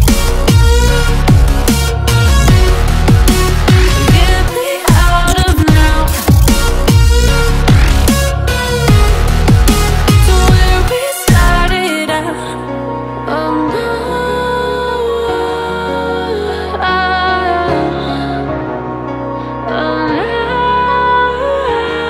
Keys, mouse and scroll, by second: 0.0 click, 0.6-1.1 scroll up 4, 1.1 click, 1.7 scroll up 2, 2.8 r, 5.0 click, 5.8 click, 6.2-7.5 scroll up 7, 7.5-8.9 scroll up 2, 8.9-10.5 drag, 10.5 Tab, 13.5 click, 17.3 b, 18.9 click, 19.2-19.5 scroll up 4, 19.5 middle click, 20.4-20.7 scroll up 2, 20.9 middle click, 21.2-21.7 scroll down 2, 21.7 middle click.